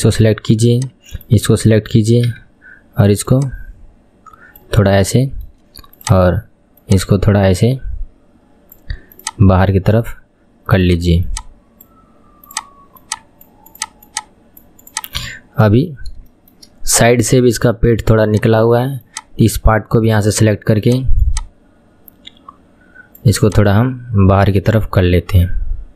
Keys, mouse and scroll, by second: 1.3 click, 2.4 KP_3, 3.4 click, 4.8-5.2 scroll up 2, 5.2 shift+middle click, 6.1 click, 7.1 click, 9.3 click, 10.9 click, 11.5 click, 12.6 click, 13.2 click, 13.9 click, 14.3 click, 15.0 click, 15.3 KP_1, 16.1-16.4 scroll down 2, 16.4-18.8 shift+middle drag, 18.8 click, 19.2 click, 21.3 click.